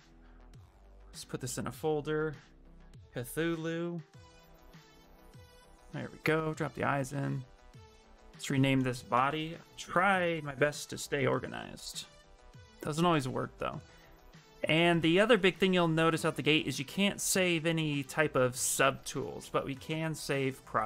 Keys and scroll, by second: 0.6 ctrl+f, 1.8-4.7 typing, 5.1 Return, 8.8-10.4 typing, 10.8 Return, 19.6 ctrl+s.